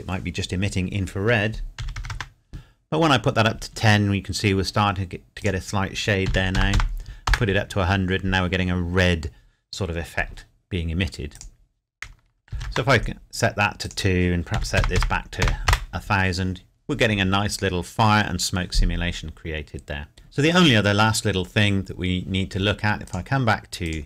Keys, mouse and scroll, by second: 1.8 KP_1, 2.1 KP_Enter, 5.4 click, 6.3 KP_1, 7.3 KP_Enter, 11.3 click, 12.5 KP_2, 12.7 KP_Enter, 13.9 click, 14.5 KP_1, 15.7 KP_Enter, 17.4-19.5 scroll down 1, 23.1 click.